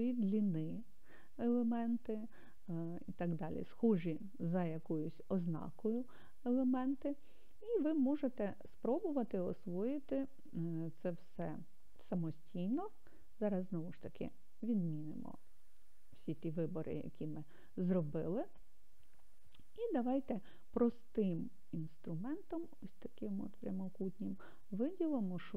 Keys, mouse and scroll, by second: 10.2 click, 15.1 alt+a, 21.9-23.7 drag.